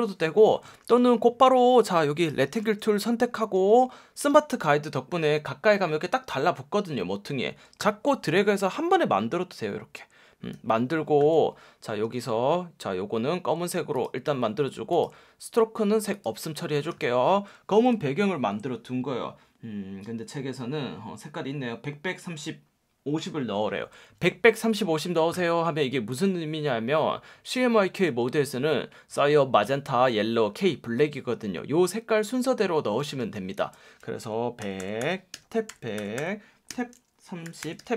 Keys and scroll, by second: 2.6 F1, 3.6 F1, 12.0 F1, 16.9 F1, 28.1 F1, 33.2 F1, 34.3-35.9 typing, 35.3 Tab, 36.7 Tab, 37.2-37.9 typing.